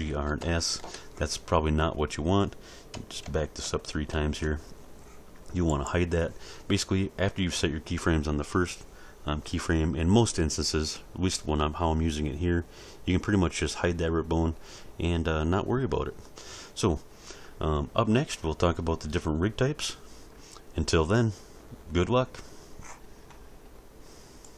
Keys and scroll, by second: 0.1 alt+r, 0.4 alt+s, 3.2 ctrl+z.